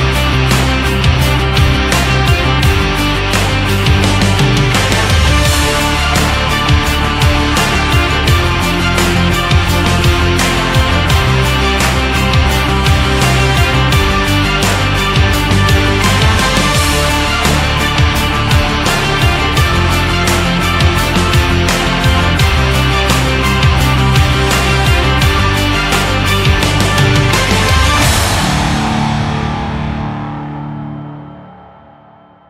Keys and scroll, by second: 6.9 Up, 16.1 shift+Up.